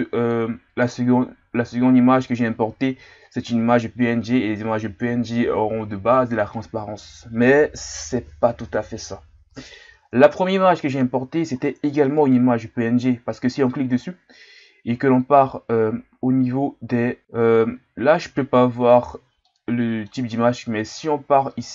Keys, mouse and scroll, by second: 11.0-12.1 middle drag, 12.1 right click, 17.2-19.1 middle drag, 19.5-21.7 middle drag.